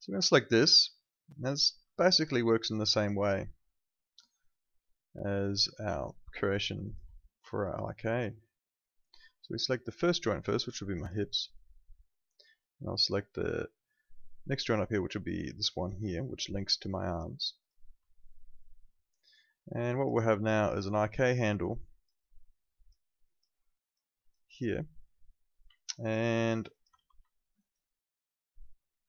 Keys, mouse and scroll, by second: 0.2 click, 0.7 alt+middle click, 1.1 alt+right click, 1.5 alt+middle click, 2.0 alt+click, 2.3 alt+right click, 2.6 alt+click, 3.1 alt+right click, 3.4 alt+middle click, 3.6 alt+click, 7.5 alt+click, 10.9 click, 17.6 click, 18.0 alt+click, 19.9 alt+click, 21.6 click, 25.7 alt+click, 25.9 alt+right click, 26.3 alt+middle click, 26.5 alt+right click, 26.7 alt+click, 26.9 w, 27.3 alt+middle click, 27.6 alt+right click, 27.8 alt+click.